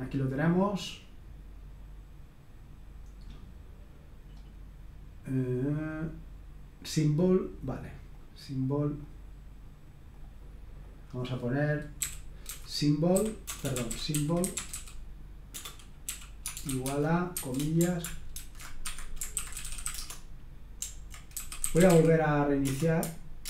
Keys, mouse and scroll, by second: 3.2-4.2 scroll down 2, 4.2-5.3 scroll down 1, 8.1-9.2 drag, 10.1-11.5 drag, 11.9-22.4 typing, 22.7 Return.